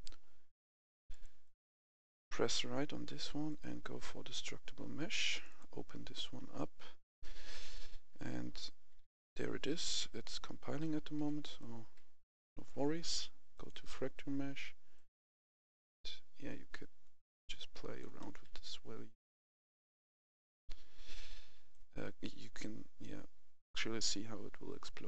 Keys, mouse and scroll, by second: 1.3 right click, 3.3 click, 7.1-10.1 right drag, 7.7-13.1 typing, 11.6 right click, 13.4-18.1 drag, 18.1 right click, 18.2 w, 18.5 a, 19.4 w, 20.1 s, 21.6-25.0 drag.